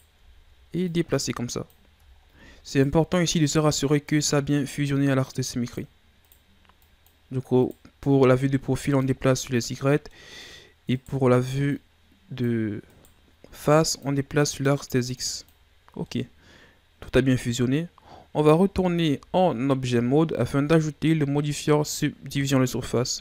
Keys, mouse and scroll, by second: 0.3-0.7 shift+scroll down 2, 0.9-2.1 drag, 2.1-2.7 shift+scroll up 4, 2.7 right click, 3.4-4.6 drag, 4.6 right click, 5.3 click, 6.2 right click, 6.8 click, 7.6 right click, 8.0-8.7 scroll down 1, 8.7 click, 9.3 scroll down 3, 9.4 middle click, 10.3-10.9 scroll up 2, 10.9 right click, 11.7-12.9 drag, 12.9 right click, 13.7 click, 14.5 right click, 15.2 click, 15.7-16.1 scroll down 1, 16.1-18.7 middle drag, 18.7 Tab, 19.7-20.2 scroll down 1, 20.2-22.3 ctrl+scroll up 3, 22.3-23.2 drag.